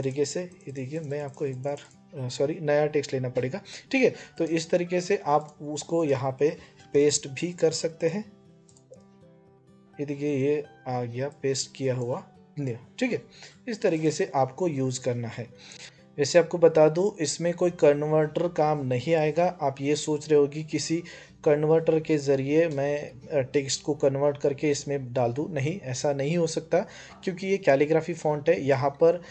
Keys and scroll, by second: 6.6 ctrl+v.